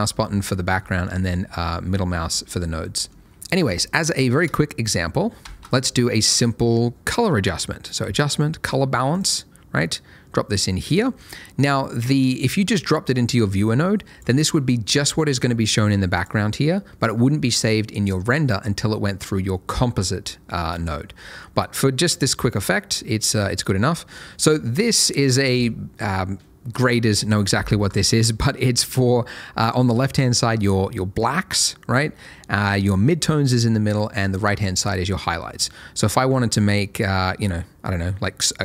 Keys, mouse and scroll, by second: 1.0 middle click, 5.9 shift+a, 9.1 click, 21.1 scroll up 1, 21.9 middle click, 24.1 click, 36.3 click.